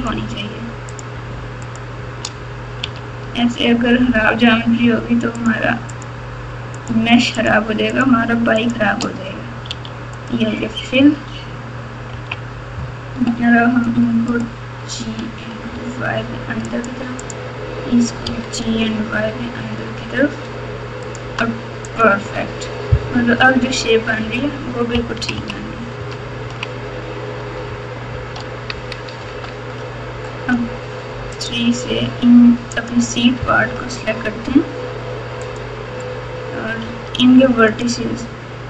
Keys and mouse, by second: 1.6 shift+click, 2.8 f, 5.3 shift+click, 5.9 shift+click, 6.7 shift+click, 7.3 shift+click, 7.9 shift+click, 9.6 f, 11.0 Tab, 12.1 KP_6, 12.3 Tab, 14.3 click, 15.3 g, 17.2 click, 18.2 g, 21.9 click, 22.2 Tab, 23.1 KP_4, 23.3 KP_4, 23.5 KP_4, 25.1 KP_6, 25.3 KP_6, 25.9 KP_6, 26.4 KP_6, 27.6 ctrl+KP_6, 28.1 ctrl+KP_6, 28.3 ctrl+KP_6, 29.2 Tab, 30.5 3, 31.3 click, 32.7 click, 33.6 KP_8, 35.4 click, 36.8 1, 37.9-38.6 drag.